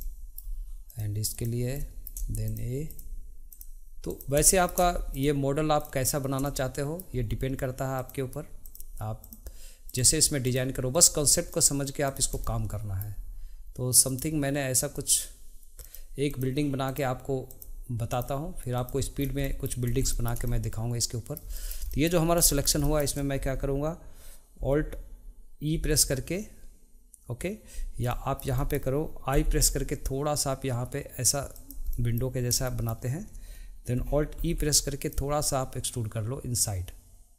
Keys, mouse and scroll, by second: 0.0 middle click, 0.9 shift+click, 1.8 middle click, 2.5 click, 2.9 click, 3.5 click, 4.1 click, 4.4 middle click, 5.1 click, 5.8 click, 6.4-7.9 middle drag, 7.9 shift+click, 8.6 shift+click, 9.2 shift+click, 9.9 shift+click, 10.4 shift+click, 10.9 shift+click, 11.5 shift+click, 12.1 shift+click, 12.4-14.1 middle drag, 14.1 shift+click, 14.9 shift+click, 16.2 click, 16.9 click, 17.5 click, 18.1 click, 18.7 click, 19.2 scroll down 1, 19.4-19.9 middle drag, 19.9 scroll up 1, 20.1 shift+middle click, 22.2 scroll up 1, 22.5 shift+middle click, 22.8 shift+middle click, 25.7 e, 28.1 middle click, 28.5 middle click, 34.4 e.